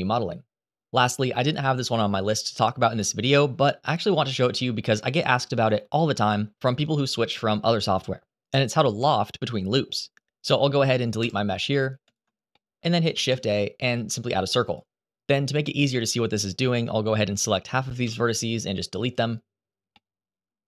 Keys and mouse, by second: 4.2 a, 10.9 Delete, 12.3 shift+middle click, 12.8 shift+a, 15.7 click, 17.8 Delete, 19.7 middle click, 20.4 a.